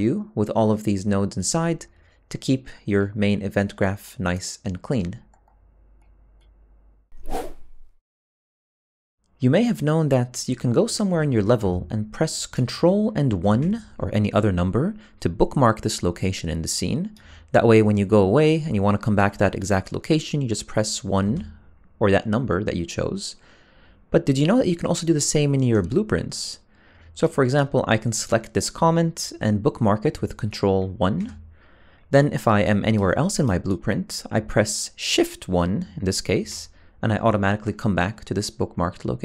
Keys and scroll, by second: 30.4 ctrl+1, 35.2 shift+1.